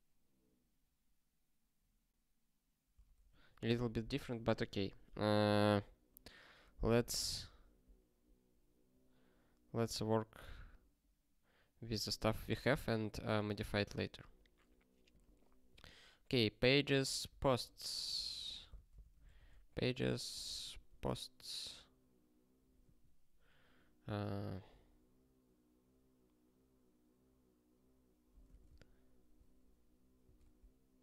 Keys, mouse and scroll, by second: 5.5-6.6 scroll up 1, 6.6 scroll down 1, 7.2 scroll down 1, 8.2 scroll up 7, 9.4 scroll up 1, 14.1-15.1 scroll down 1, 15.1 click, 17.4 ctrl+f, 18.7 ctrl+k.